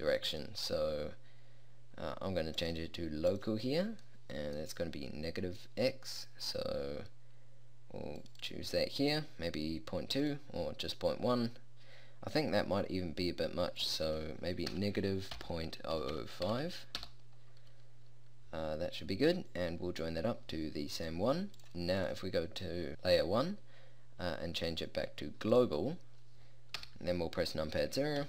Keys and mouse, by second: 2.7-4.5 drag, 8.3-12.3 drag, 16.2 0, 26.9 KP_0.